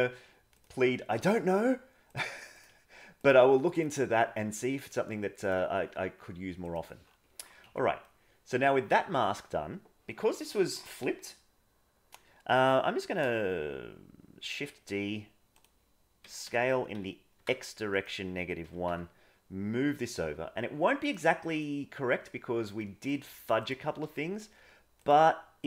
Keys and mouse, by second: 3.7 click, 3.9 g, 5.5 g, 7.6 Tab, 8.0 middle click, 8.9 Tab, 9.2 a, 14.6 shift+d, 16.2 s, 18.6 g, 21.6 middle click, 22.8 middle click, 24.0 g.